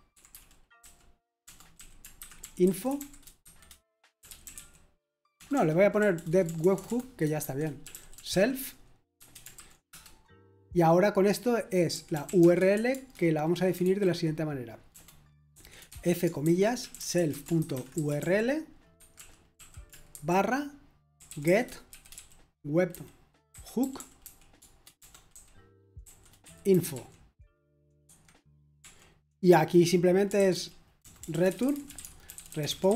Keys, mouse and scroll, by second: 2.9-6.4 typing, 7.6-9.9 typing, 11.6-13.8 typing, 14.9-27.4 typing, 28.0 Escape, 28.5-32.9 typing.